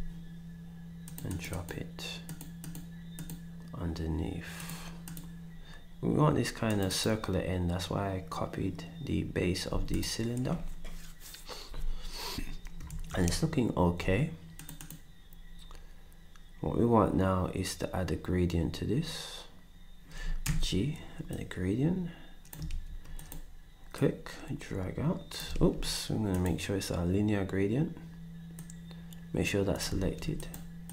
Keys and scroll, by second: 9.7 s, 12.9 ctrl+s, 20.4 g, 22.9 ctrl+z, 25.5 ctrl+z, 30.0 ctrl+z.